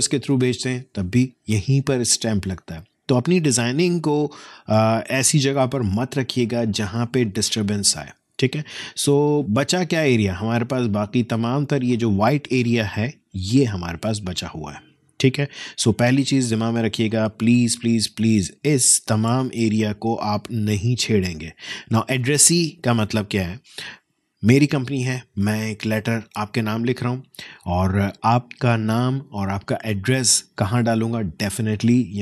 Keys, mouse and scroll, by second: 17.2 click, 18.4-23.8 alt+drag.